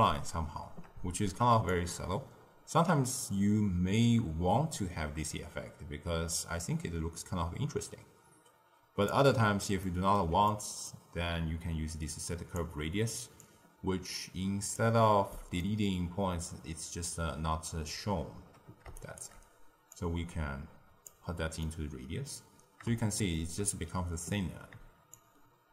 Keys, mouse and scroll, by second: 1.6-4.7 shift+drag, 9.7-12.2 ctrl+middle drag, 12.2 click, 12.7 m, 13.4 click, 15.2 middle click, 15.7-18.1 scroll down 1, 18.9 shift+right click, 19.8 click, 21.5-25.1 middle drag, 25.1-25.7 shift+drag.